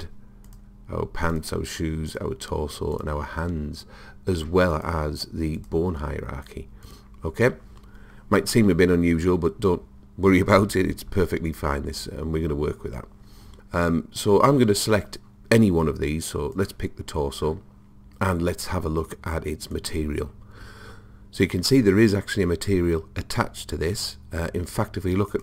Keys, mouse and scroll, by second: 16.6 click, 19.8 click, 25.3-25.4 drag.